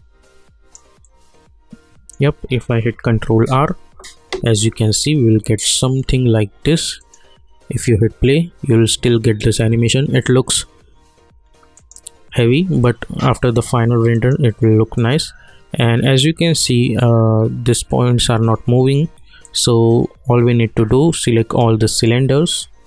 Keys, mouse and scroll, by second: 1.0-3.0 alt+middle drag, 3.0 ctrl+r, 4.9-7.0 alt+middle drag, 7.0 click, 11.7 click, 14.1 click, 19.4 click, 21.9 shift+click.